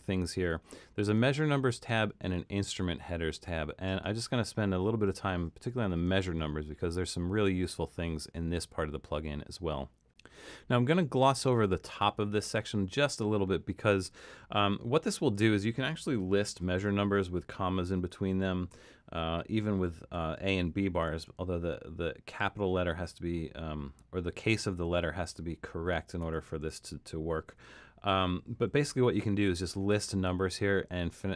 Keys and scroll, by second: 16.6-20.1 typing, 21.1 shift+a, 24.4 BackSpace, 24.9 a, 26.2 BackSpace, 26.6 shift+a, 27.5 ,, 28.6-29.6 typing.